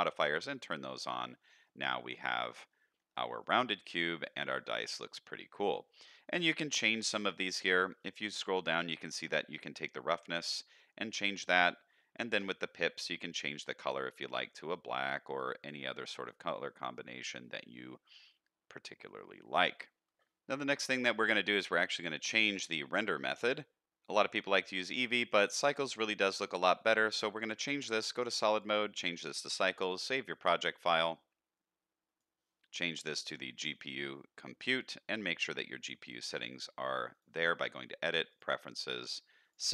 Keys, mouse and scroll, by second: 0.1 click, 0.4 click, 0.9 middle drag, 1.6-2.4 middle drag, 2.6-3.1 middle drag, 3.4-3.7 middle drag, 4.0 middle drag, 4.5 shift+middle drag, 4.8-5.5 middle drag, 6.3 click, 7.0-7.6 scroll down 2, 7.6-9.3 scroll down 6, 9.3-11.5 drag, 11.8-13.0 scroll up 6, 13.0-13.6 scroll up 2, 13.6 click, 14.3 click, 16.6-17.0 middle drag, 17.4 middle drag, 18.0-19.7 middle drag, 20.6 middle drag, 22.6 click, 25.2 click, 26.7 middle click, 27.0 z, 28.5-29.2 drag, 30.4-32.2 drag, 33.0-33.9 drag, 35.1 drag, 36.0 click, 36.3 click, 37.1-38.4 drag.